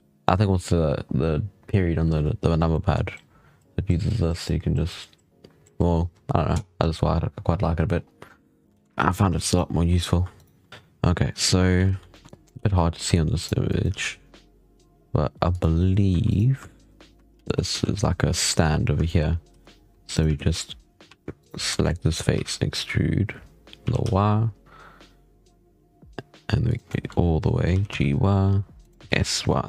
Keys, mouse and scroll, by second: 2.4 scroll down 1, 2.6-3.0 middle drag, 6.6-7.8 scroll up 5, 7.8-8.1 scroll down 2, 8.1-8.5 scroll up 6, 8.5 scroll down 1, 8.6 shift+middle click, 8.8 z, 9.0 3, 9.3 right click, 10.3 shift+right click, 10.7-11.7 scroll up 8, 11.7 alt+a, 11.8 scroll down 2, 12.0 shift+middle click, 12.3 click, 12.5 g, 13.6 click, 13.8 g, 16.0 e, 16.9 3, 17.3 ctrl+z, 17.6 ctrl+z, 18.9 shift+middle click, 19.4 e, 20.2 ctrl+z, 20.9 3, 21.3 right click, 21.6 shift+middle click, 21.8 scroll down 2, 22.2 e, 26.8 shift+middle click, 27.6 g, 28.9 s.